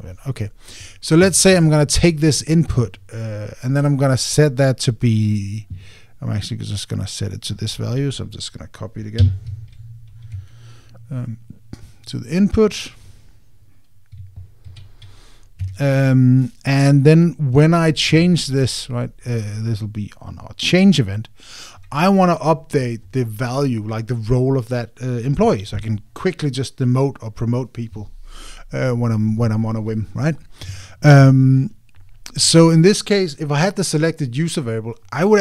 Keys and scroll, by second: 10.2 super+c, 11.1 Escape, 15.4 super+v, 16.4 Escape.